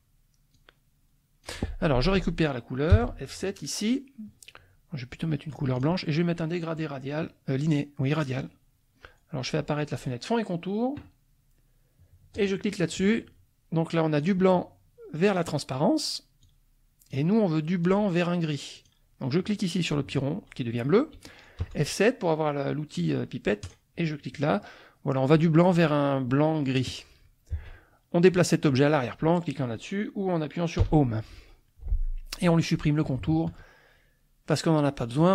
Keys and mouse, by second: 0.5-1.6 drag, 2.9 F7, 3.6 click, 5.8 click, 8.2 click, 9.9 click, 12.3 click, 14.2 click, 15.2 click, 16.4 click, 17.9 click, 18.7 click, 21.6 F7, 23.6 click, 27.5 F1, 30.8 End.